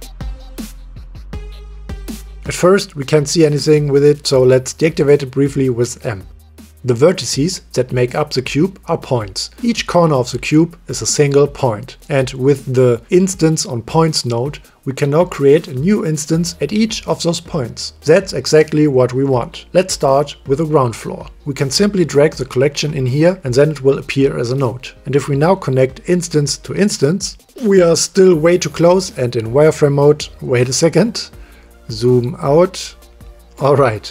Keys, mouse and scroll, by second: 3.0 click, 7.4 m, 13.0 m, 13.8 click, 20.0 click, 23.4 click, 25.0 click, 26.0-27.5 drag, 32.4 click, 33.9 middle drag.